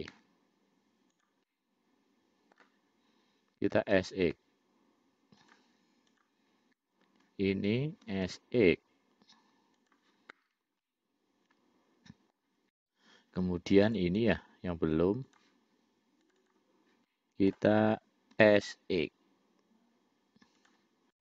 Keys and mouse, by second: 0.4 e, 1.8-2.9 middle drag, 4.0 s, 6.3 click, 8.4 s, 11.1-12.6 middle drag, 14.0 click, 14.3 click, 15.6-16.7 drag, 16.8 click, 17.4 middle click, 18.7 s.